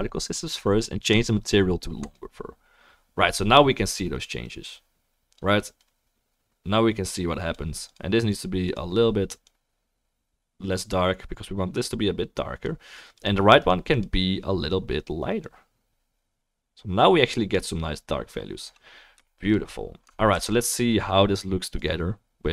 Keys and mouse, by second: 1.2-2.3 drag, 4.7-8.0 drag, 4.7-12.3 middle drag, 4.7-12.3 right drag, 8.6 click, 12.3 click, 13.7 click, 14.0-15.5 drag, 15.5-22.5 right drag, 20.4 ctrl+s, 21.8 click, 21.8 middle click.